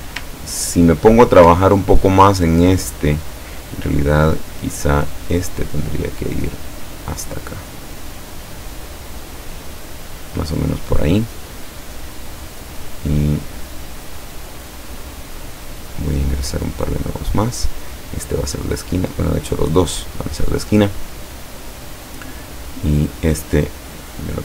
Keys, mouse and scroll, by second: 0.6-1.1 ctrl+scroll up 2, 6.9-10.6 drag, 14.0 click, 15.3 click, 17.1 click, 19.1 click, 19.9 click, 23.0 click, 23.7-24.4 drag.